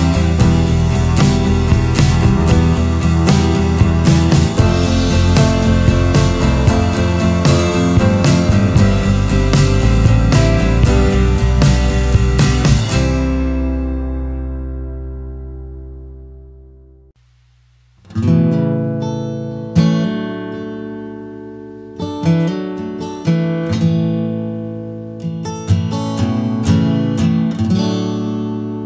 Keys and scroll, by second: 20.5 Right, 20.6-21.4 Right, 21.6 Right, 21.7 Right, 21.9 Right, 26.3 ctrl+c, 26.6 ctrl+v.